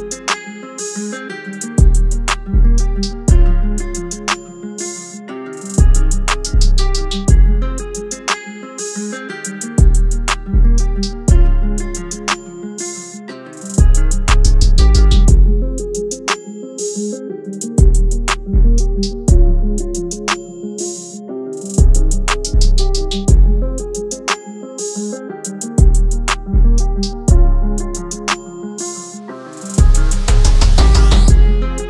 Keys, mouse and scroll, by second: 0.5 click, 3.3 click, 5.2 click, 7.7 click, 13.1 Tab, 14.4 shift+Tab, 15.0 shift+Tab, 18.0 click, 18.9 Tab, 20.0 shift+Tab, 24.3 click, 28.8 Tab, 29.5 shift+Tab, 30.9 shift+Tab.